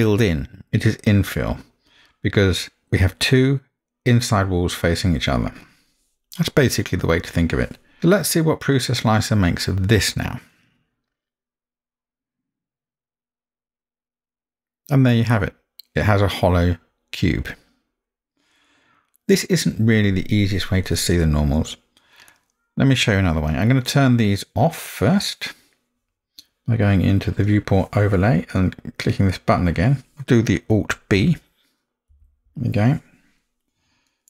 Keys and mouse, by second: 8.0-10.4 middle drag, 10.4 click, 10.4 middle click, 20.9-23.3 middle drag, 27.4-29.7 drag, 32.1 alt+b, 34.1-34.2 middle drag.